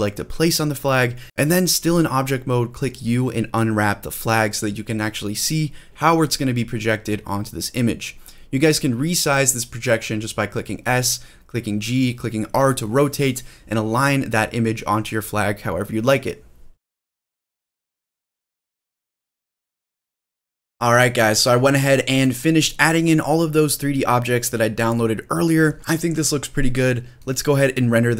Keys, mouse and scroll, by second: 0.0 click, 1.7 click, 3.4 u, 9.1 r, 13.3 click, 13.7 ctrl+z, 13.8 s, 14.6 click, 14.7 g, 15.3 click, 15.5 s, 16.0 click, 16.2 g, 17.0 click, 18.2 Tab, 18.6 space, 20.7 click, 23.3 click.